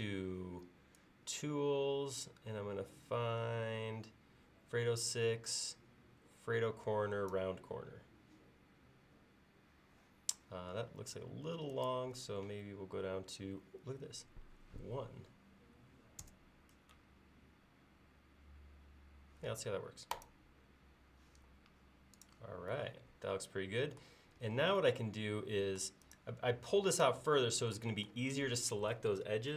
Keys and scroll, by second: 14.7 1, 16.3 Return.